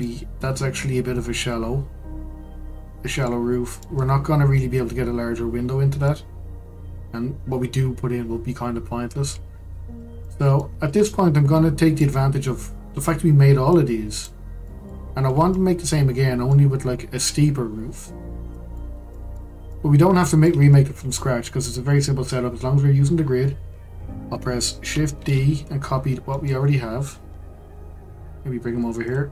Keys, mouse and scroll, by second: 0.0-9.5 middle drag, 9.5-10.2 scroll down 6, 10.2-13.7 shift+middle drag, 13.7 click, 14.6-15.1 middle drag, 15.1-15.5 scroll up 2, 15.5-18.1 middle drag, 18.1-18.5 scroll down 2, 18.5-23.7 middle drag, 25.1 shift+d.